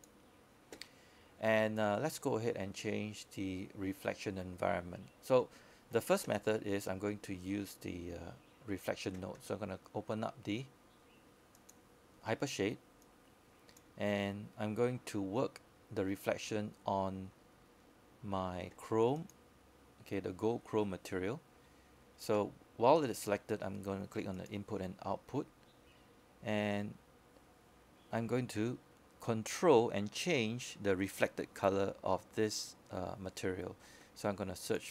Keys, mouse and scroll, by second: 1.4 click, 19.1-19.6 scroll down 1, 19.6-20.9 scroll up 1, 21.0 click, 32.3-34.6 scroll up 1, 34.6-34.9 scroll down 1.